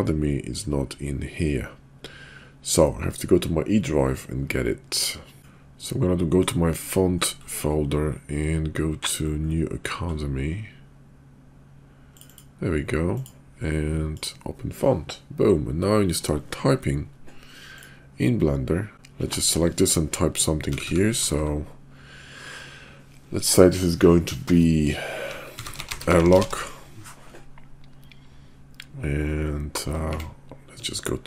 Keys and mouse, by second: 17.7 click, 18.9 Tab, 20.7 a, 20.8 a, 21.1 BackSpace, 21.4 BackSpace, 25.6-26.4 typing, 30.1 Tab.